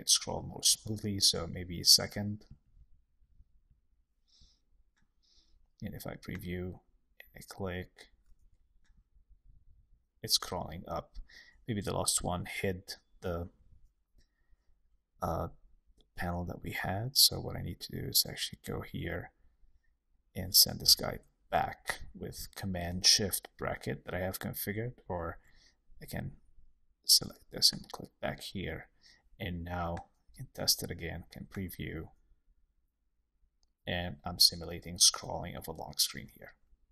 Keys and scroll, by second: 20.8 shift+super+[, 25.2 super+z.